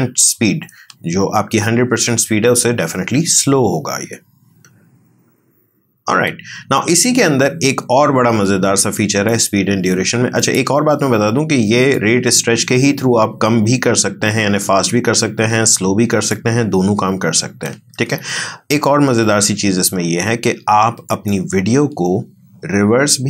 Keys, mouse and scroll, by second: 0.8 space, 6.2 space, 9.3 right click, 10.4 click, 21.1 right click.